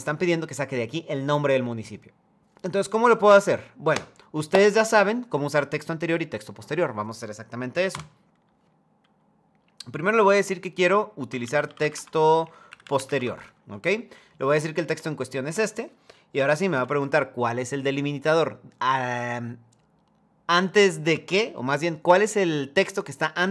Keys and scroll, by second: 12.3 Down, 12.5 Up, 12.6 |, 12.9 Tab.